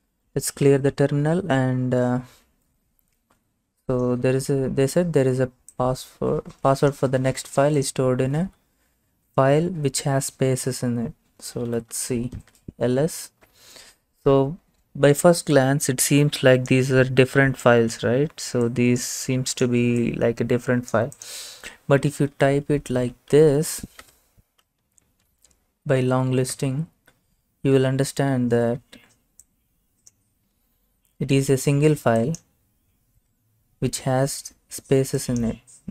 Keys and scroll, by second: 11.5-12.2 typing, 12.4 Return, 22.4-24.6 typing, 26.6 Return, 26.6 typing.